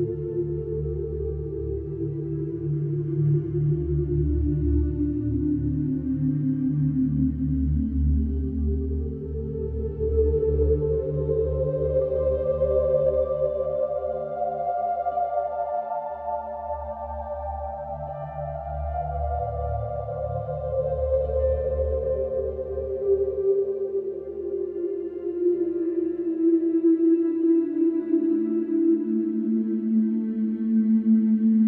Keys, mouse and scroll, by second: 2.6 click, 4.3 click, 6.8 l, 7.2 z, 7.7 middle click, 8.4 F3, 9.0 middle click, 9.1 click, 10.3 click, 15.0 click, 16.0 F3, 17.2 alt+middle click, 18.8 click, 20.3 ctrl+shift+a, 21.7 alt+q, 22.9 click, 24.5 right click, 26.6 click, 27.7 click, 29.1 click, 30.1 right click, 30.8 click.